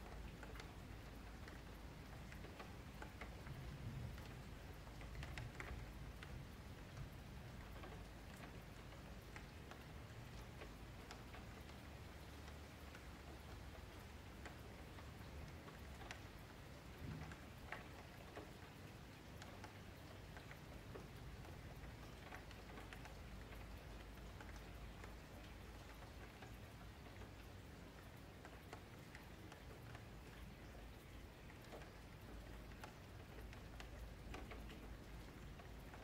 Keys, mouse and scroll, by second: 0.6 Tab, 0.8-1.7 scroll up 5, 1.2 shift+middle click, 2.0 1, 2.2 click, 2.5 middle click, 3.2 shift+click, 4.7 click, 5.3 click, 5.6 middle click, 6.6 click, 7.2 click, 8.0 click, 8.4 middle click, 9.0 shift+click, 9.7 middle click, 10.1 click, 10.3-10.6 scroll up 2, 10.6 Tab, 10.8 scroll down 2, 11.1 middle click, 11.3 3, 11.6 click, 12.6 click, 13.1 q, 14.7 ctrl+click, 14.9 ctrl+click, 15.6 ctrl+click, 15.9 ctrl+click, 16.1 ctrl+click, 16.5-19.3 middle drag, 19.3-19.6 scroll up 2, 19.6-20.7 middle drag, 22.3 middle click, 23.3 click, 26.0-28.9 middle drag, 28.9 click, 35.3 middle click, 35.9 ctrl+KP_Add.